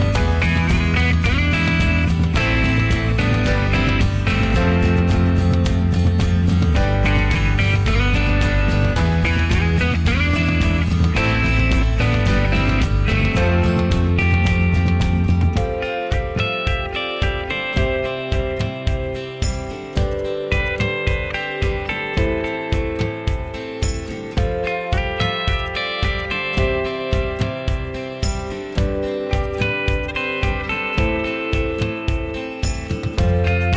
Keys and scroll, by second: 2.4 ctrl+z, 3.4 Escape, 3.9 ctrl+a, 4.6 ctrl+a, 5.4 ctrl+h, 8.5 l, 14.4 e, 16.6 Escape, 17.5 h, 20.5 p, 21.5 Escape, 24.0 m, 25.8 p, 26.6 Escape, 29.8 p, 31.4 Escape, 33.6 p.